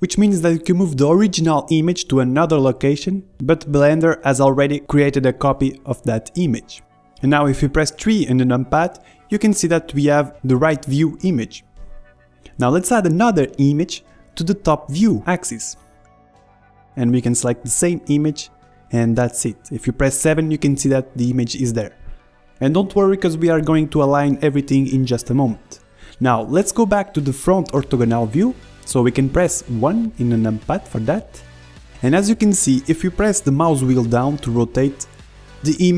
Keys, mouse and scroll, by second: 0.3-2.6 drag, 1.7-4.8 middle drag, 4.8-6.6 drag, 6.5 middle click, 9.4 KP_3, 10.7 KP_1, 11.3 KP_3, 11.8 KP_1, 13.7-18.7 drag, 18.9-21.3 drag, 21.7 KP_7, 27.3 KP_3, 28.1 KP_1, 31.4-32.5 drag, 32.5-34.5 middle drag, 33.2 click, 35.4 middle click.